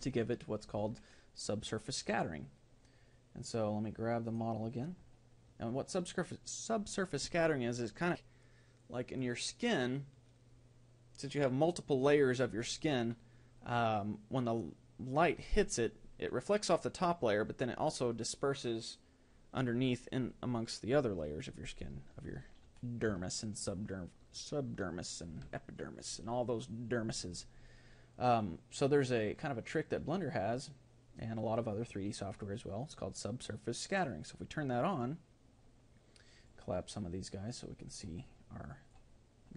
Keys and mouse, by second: 0.0 Escape, 4.4-23.1 right drag, 23.9-25.9 middle drag, 25.9 a, 36.1-39.5 drag.